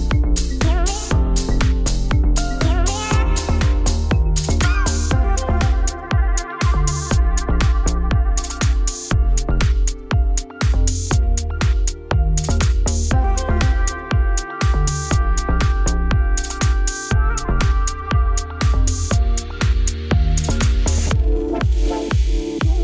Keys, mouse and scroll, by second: 0.2 alt+click, 0.4 ctrl+b, 2.3 ctrl+r, 4.1 Tab, 4.9 click, 5.5-7.3 right drag, 7.3-10.3 drag, 11.2 click, 11.5-13.5 shift+drag, 13.5 scroll down 5, 14.0 scroll up 2, 14.4 click, 14.7 ctrl+1, 15.2 Tab, 15.4 3, 15.5 click, 16.0 z, 16.9 Tab, 17.1 scroll down 2, 17.2 z, 17.5 click, 17.6-18.8 middle drag, 19.4 click, 19.5 g, 20.9 shift+middle click, 21.1 scroll down 3, 21.5 middle click, 22.0 scroll up 3, 22.2 shift+middle click.